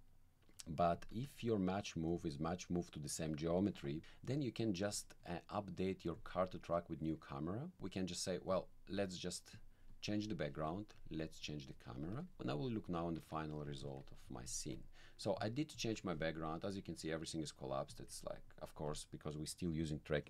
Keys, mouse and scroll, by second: 0.9 click, 1.1 1, 2.1-3.3 drag, 6.2-7.2 drag, 8.5 click, 9.5-10.6 drag, 10.9 click, 12.0 alt+middle click, 12.8 click, 13.2 1, 13.9 alt+click, 13.9 alt+middle click, 14.6 alt+click, 15.8 alt+click, 18.0 alt+click.